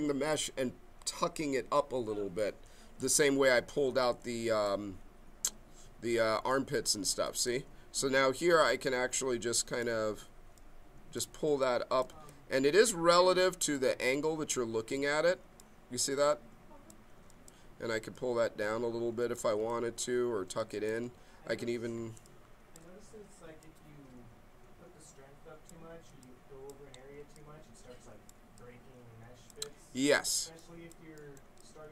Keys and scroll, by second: 12.1 ctrl+z, 22.1 b.